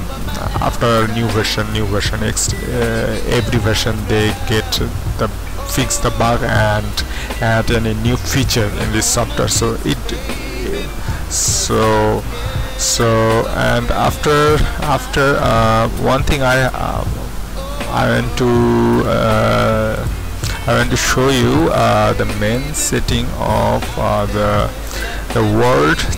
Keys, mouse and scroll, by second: 22.5 click, 22.6 click, 24.5 click.